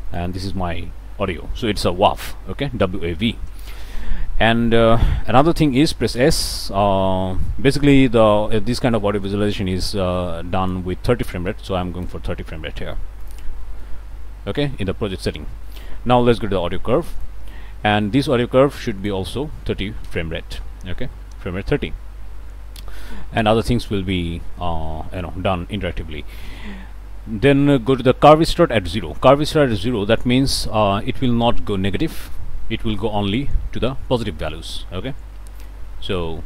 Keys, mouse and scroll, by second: 0.1 click, 4.7 click, 5.6 click, 6.1 s, 10.3 click, 11.3-12.1 typing, 13.2 click, 13.6 click, 15.7 click, 16.9 click, 18.9 click, 19.4-20.3 typing, 23.0 click, 35.6 click.